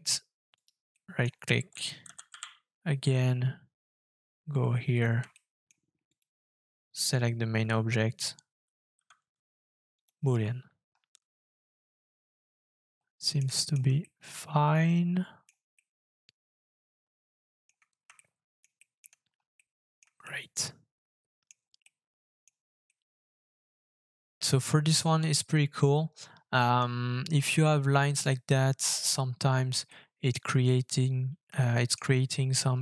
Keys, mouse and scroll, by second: 0.5 right click, 0.9 middle click, 2.3 g, 5.3 shift+middle click, 6.1 shift+click, 8.9 f, 10.9-11.7 scroll up 4, 11.7 middle click, 11.8 shift+middle click, 12.3 scroll up 1, 12.5 middle click, 12.8 shift+middle click, 13.5 middle click, 14.0 shift+middle click, 15.7 shift+middle click, 17.9 scroll down 2, 18.1 shift+middle click, 18.7 shift+middle click, 19.2 scroll up 3, 19.5 middle click, 20.2 shift+middle click, 21.8 shift+middle click, 22.9 shift+middle click, 23.4-24.3 scroll down 4, 24.3 middle click, 28.3 middle click, 29.9 middle click, 31.6 shift+middle click, 32.7-32.8 shift+scroll up 5.